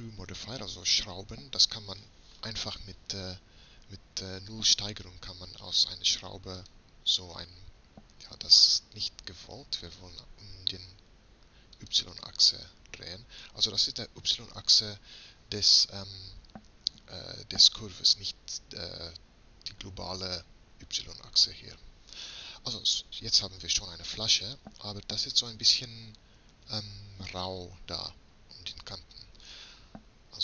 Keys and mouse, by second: 9.9-11.8 drag, 26.0 middle click, 28.0-30.4 middle drag.